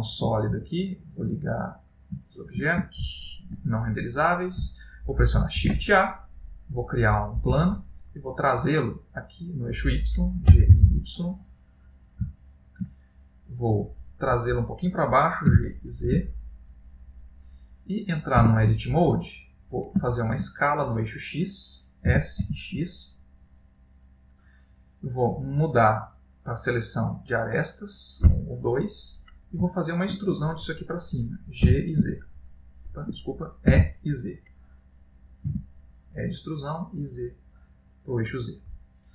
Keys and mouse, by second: 1.5 click, 2.2 shift+middle click, 6.1 shift+a, 12.0 g, 12.4 shift+middle click, 13.0 middle click, 14.0 middle click, 15.1 shift+middle click, 15.5 g, 17.6 middle click, 18.4 Tab, 20.1 shift+middle click, 21.0 middle click, 22.1 s, 27.1 click, 28.0 click, 28.5 middle click, 29.7 ctrl+middle click, 30.3 middle click, 31.7 g, 34.4 e, 38.9 middle click.